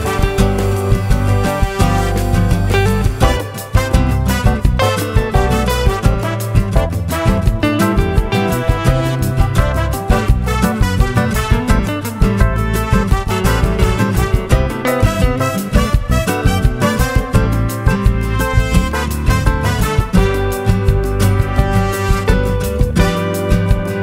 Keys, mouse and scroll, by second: 0.8 shift+click, 1.8 shift+click, 2.5 shift+click, 3.5 shift+click, 4.1 shift+click, 5.6 shift+click, 6.3 shift+click, 6.9-8.6 shift+drag, 9.1-11.3 shift+drag, 11.6 shift+click, 12.7 shift+click, 13.6 shift+click, 16.2 shift+click, 16.7 shift+click, 17.1-18.2 shift+drag, 18.8-20.5 shift+drag, 22.6 shift+click, 23.0-24.0 shift+drag.